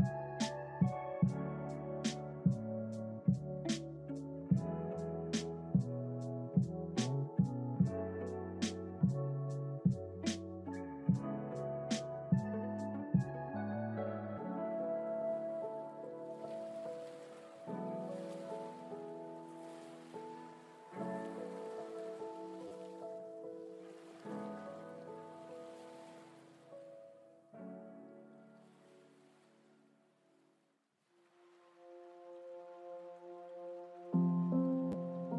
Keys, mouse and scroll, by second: 0.4 click, 1.6 scroll up 1, 8.4 click, 10.7 click, 13.5-16.5 drag, 19.1 click, 26.3-31.0 drag.